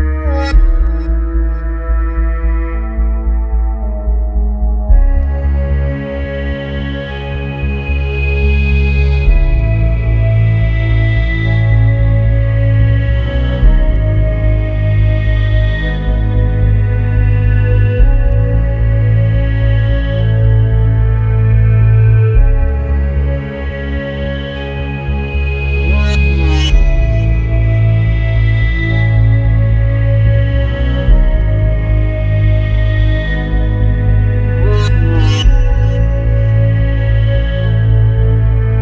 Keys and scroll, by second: 2.5 ctrl+f, 5.0 ctrl+e, 11.3 alt+s, 11.7 Escape, 12.0 alt+s, 12.3 Escape, 13.1 Escape, 14.3 alt+z, 16.2 alt+z, 17.5 alt+z, 18.2 alt+z, 19.7 ctrl+z, 24.9 ctrl+z, 34.3 ctrl+e, 35.8 ctrl+e, 37.1 ctrl+e.